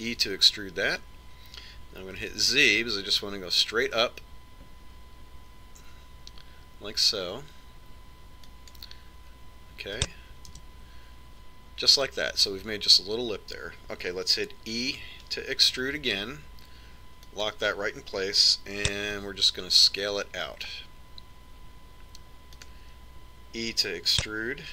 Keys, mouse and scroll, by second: 1.5 e, 12.0 KP_1, 17.4 e, 20.8 s.